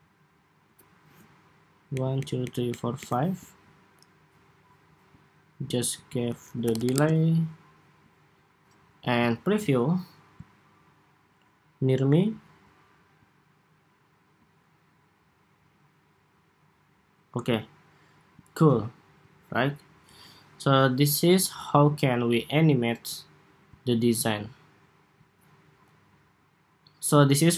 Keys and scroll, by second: 21.4 super+s.